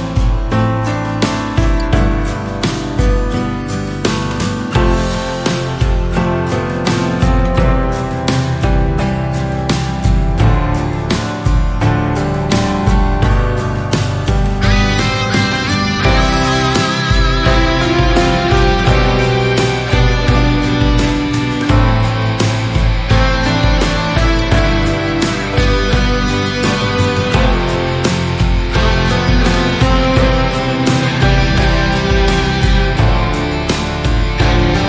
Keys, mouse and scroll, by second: 0.3 s, 3.0-3.4 scroll up 1, 3.4-3.9 scroll down 1, 3.9 KP_3, 4.9 KP_1, 6.1 s, 9.6 KP_3, 10.2-12.3 scroll up 1, 12.3-12.8 scroll up 2, 12.8 s, 15.4 drag, 15.7 scroll down 1, 15.9-16.7 middle drag, 16.7 click, 17.0 scroll down 2, 17.3-18.4 middle drag, 18.4 click, 19.8 click, 21.1-21.5 middle drag, 21.5-22.7 scroll up 1, 22.7 click, 23.3 click, 25.9 shift+d, 29.2-30.5 middle drag, 30.5 s, 32.2 scroll up 3, 34.2 Tab.